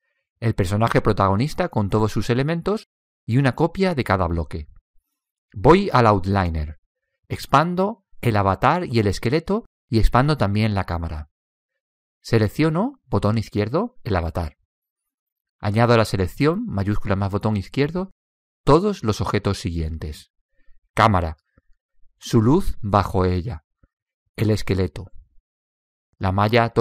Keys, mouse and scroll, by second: 8.3 click, 14.5 click, 21.3-24.3 drag, 25.0 click.